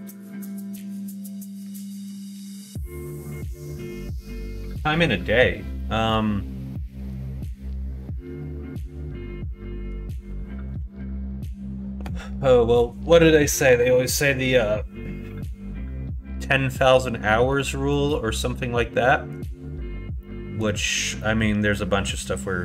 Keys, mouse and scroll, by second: 0.6 shift+middle click, 2.6 middle click, 3.6 shift+middle click, 5.8 middle click, 6.7 middle click, 17.2 middle click, 17.9-19.3 middle drag, 20.2 middle click, 21.2 middle click.